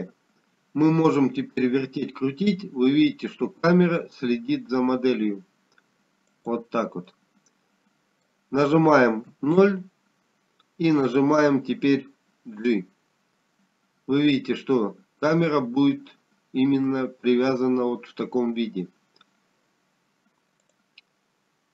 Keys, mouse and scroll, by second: 2.0 middle click, 4.4 g, 10.7 middle click, 13.0 KP_0, 15.5 g.